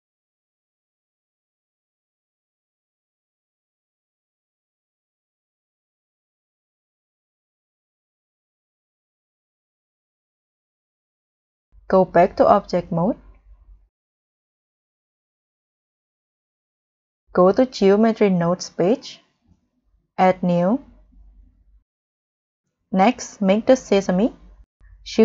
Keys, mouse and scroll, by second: 5.1 middle click, 8.8 middle click, 8.9 middle click, 9.6 middle click, 10.4 scroll up 1, 11.0 scroll down 1, 11.4 scroll up 1, 15.4-18.1 scroll down 14, 18.9 scroll down 1, 18.9-19.5 scroll up 5, 20.6-21.0 scroll down 3, 21.1-21.6 scroll up 3, 21.6-21.9 scroll down 3, 22.0-22.6 scroll up 3, 24.3-25.1 scroll up 2.